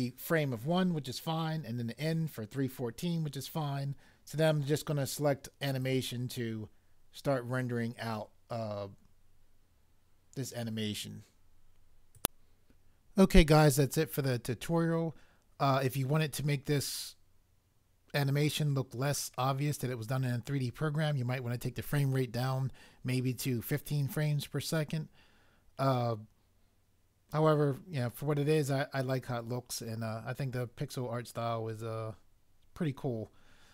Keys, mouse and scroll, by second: 12.2 click.